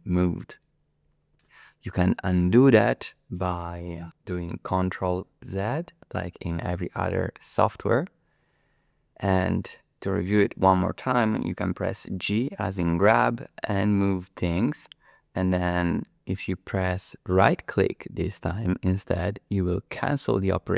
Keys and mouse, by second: 5.4 ctrl+z, 12.6 g, 20.1 click.